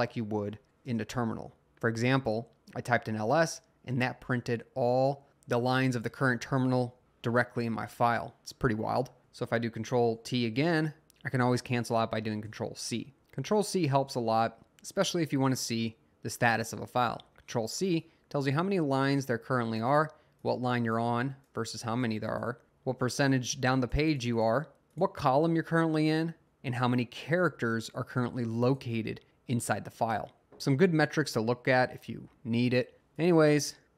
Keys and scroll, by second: 0.2-0.9 typing, 4.0 Up, 4.4 Up, 5.1 Up, 5.5 Up, 6.1 Up, 6.8 Up, 7.0 Down, 13.1 c, 13.9 c.